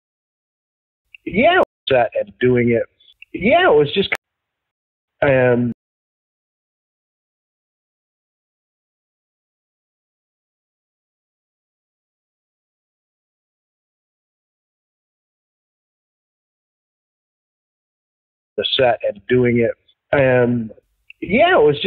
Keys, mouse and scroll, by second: 0.7 ctrl+shift+Delete, 1.0 space, 1.5 space, 1.7 click, 1.8 space, 4.1 ctrl+z, 4.6 space, 5.0 space, 5.6 space, 6.2 click, 7.2-8.2 drag, 8.8 ctrl+shift+Delete, 10.0-12.1 drag, 12.8 ctrl+shift+Delete, 13.7 click, 14.7 click, 16.2 click, 17.3 click, 18.4 click, 18.5 space, 21.6 click.